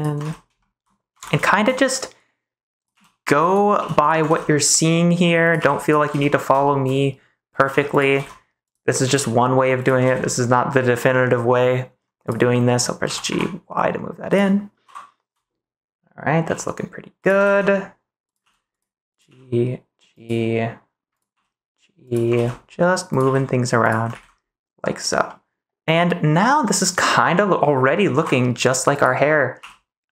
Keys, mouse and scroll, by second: 0.2 ctrl+s, 0.5 shift+middle click, 1.2 ctrl+s, 1.4 shift+middle click, 2.9 g, 3.7 g, 3.9 click, 4.2 ctrl+s, 5.4 click, 5.5 g, 5.7 click, 6.1 ctrl+s, 6.6 shift+middle click, 7.4 click, 7.6 g, 7.8 click, 8.1 ctrl+s, 8.6 click, 9.0 g, 9.7 click, 10.0 ctrl+s, 11.1 middle click, 12.2 click, 12.5 middle click, 13.0 g, 13.2 y, 14.2 click, 14.8 KP_3, 16.4 g, 17.1 click, 17.4 ctrl+s, 18.2 click, 18.4 g, 18.7 click, 19.1 click, 19.2 g, 20.1 click, 21.1 click, 21.2 g, 22.3 ctrl+s, 23.0 click, 23.2 g, 23.8 click, 24.1 ctrl+s, 25.2-27.1 middle drag, 28.1 KP_3, 28.9 click, 29.5 g.